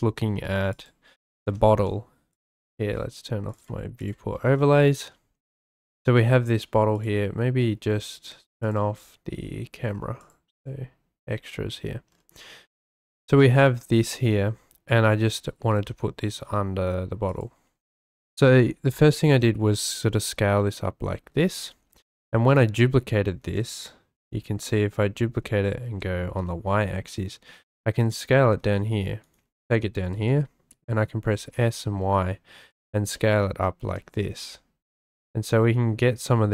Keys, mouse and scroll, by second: 1.2 g, 1.4 y, 2.3 click, 3.5 click, 4.6 shift+drag, 6.9 click, 8.6-10.4 drag, 10.4 right click, 15.6 g, 15.8 y, 17.3-17.7 right drag, 19.2 s, 19.3 y, 21.4 click, 22.2 shift+d, 24.1 g, 25.8 y, 28.0 click, 28.6 s, 28.6 z, 29.2-30.2 drag, 31.1 s, 31.4 y, 32.7 drag, 33.1-33.9 shift+drag, 34.2 s, 34.4 y.